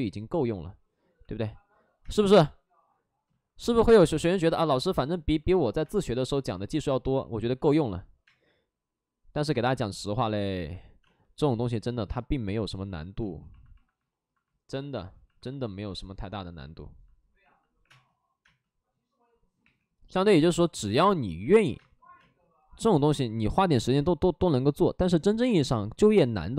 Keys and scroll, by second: 1.9 space, 5.3 space, 7.5 ctrl+z, 8.1 space, 10.9 space, 12.0 space, 13.1 space, 14.8 space, 17.7 3, 18.3 space, 19.5 3, 20.1 space, 23.2 ctrl+z, 23.2 space, 25.3 space.